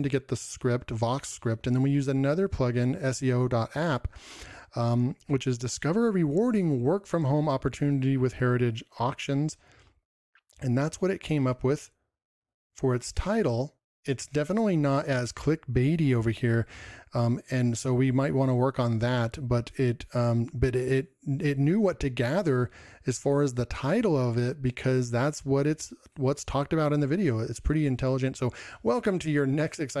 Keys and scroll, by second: 21.5 ctrl+m.